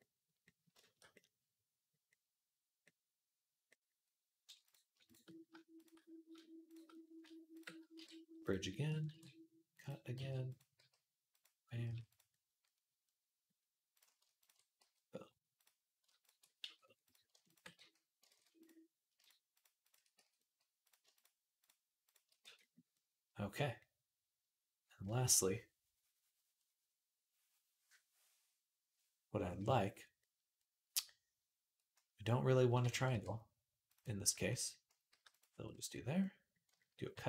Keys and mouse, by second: 1.1-3.0 drag, 3.3-6.4 middle drag, 6.4 shift+click, 6.5 shift+middle click, 7.7 q, 8.9 ctrl+r, 9.9 s, 10.6 g, 11.6 s, 14.2 ctrl+click, 14.6 middle click, 14.6 f, 15.4 click, 15.8 ctrl+middle click, 16.0 ctrl+click, 16.1 ctrl+middle click, 16.4 f, 16.8 click, 16.9 ctrl+middle click, 17.6 f, 18.1 ctrl+z, 19.6 shift+click, 20.0 f, 20.9 shift+click, 21.0 shift+middle click, 21.4 click, 21.5-33.1 middle drag, 22.2 f, 32.9 ctrl+r, 33.1-36.0 drag, 34.9 g, 36.0-37.2 middle drag, 36.9 ctrl+r.